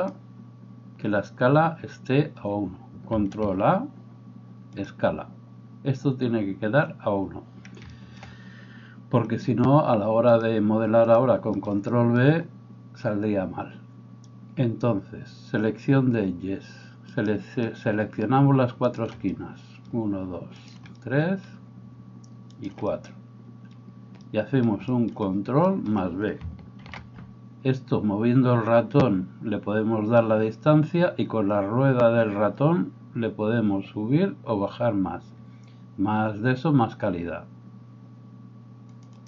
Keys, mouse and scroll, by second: 0.2-22.6 middle drag, 3.4 ctrl+a, 10.3-19.0 drag, 17.1 right click, 19.4 click, 20.8 click, 24.2 click, 24.2-26.8 middle drag, 25.1 click, 25.9 click, 26.8 ctrl+b, 26.8-39.1 ctrl+drag, 29.8-33.8 middle drag, 34.9 middle click, 39.1-39.2 middle drag.